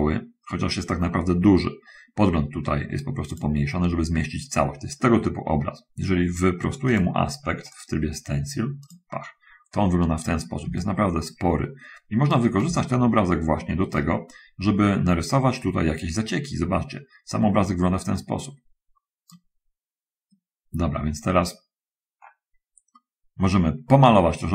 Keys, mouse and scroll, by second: 3.6 click, 7.2 click, 8.1 click, 8.7 click, 11.1-12.8 shift+right drag, 13.1-14.4 shift+right drag, 14.6 shift+right click, 14.7-19.4 middle drag, 22.3 middle click.